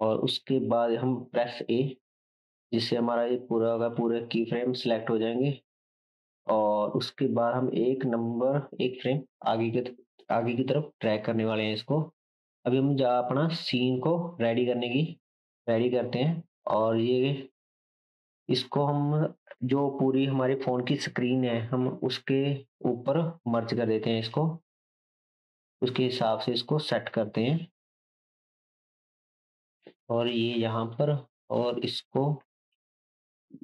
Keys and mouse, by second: 1.5 a, 7.0 g, 12.2-17.6 drag, 26.3 Tab, 27.1 2, 28.3 g, 31.4 click, 32.2 g.